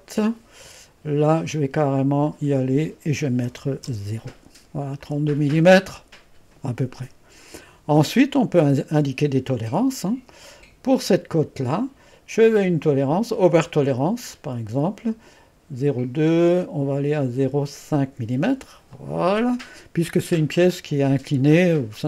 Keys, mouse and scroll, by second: 0.0 click, 1.5 click, 2.3 click, 5.0 click, 10.9 click, 14.4 click, 19.0-20.1 drag.